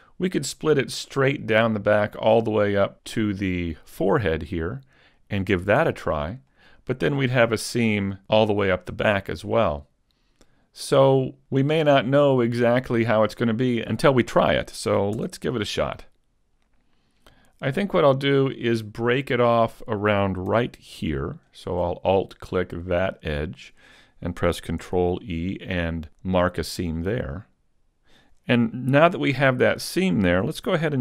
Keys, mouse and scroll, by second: 2.2 middle click, 3.1 middle click, 6.6 middle click, 10.3 middle click, 11.0 scroll up 1, 15.2 Tab, 15.7 middle click, 18.4 middle click, 21.5 alt+right click, 22.2 middle click, 24.9 ctrl+e, 29.1 a, 30.6 a.